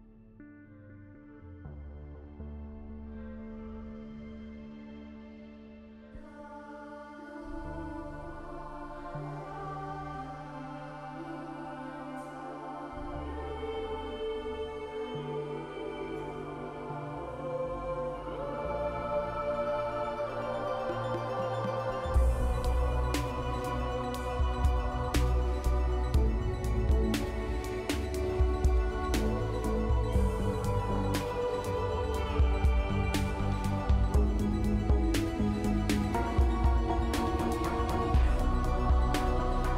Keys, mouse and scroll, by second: 3.8-4.9 scroll up 2, 5.2 scroll up 1, 5.4-5.8 scroll down 2, 6.6 scroll down 1, 6.6-7.7 scroll up 3, 7.7 scroll up 1, 7.7-8.3 scroll down 3, 8.7 scroll up 2, 9.5-9.8 scroll down 3, 10.3 scroll up 3, 11.6-12.6 scroll down 2, 12.6 scroll down 1, 12.6-13.5 scroll up 2, 13.5 scroll up 2, 13.5-15.0 scroll down 4, 21.1-22.6 typing.